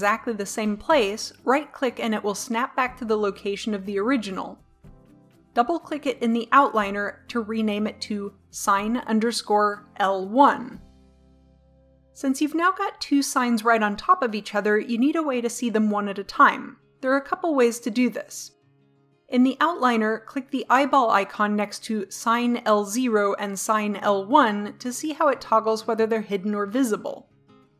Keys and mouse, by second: 5.8-10.8 drag, 20.6-27.7 drag.